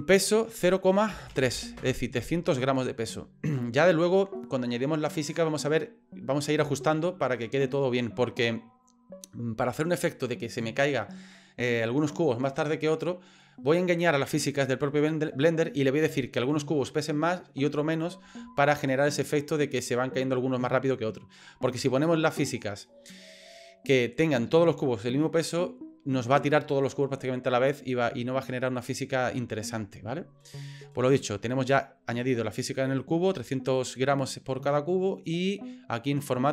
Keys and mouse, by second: 0.2-2.5 drag.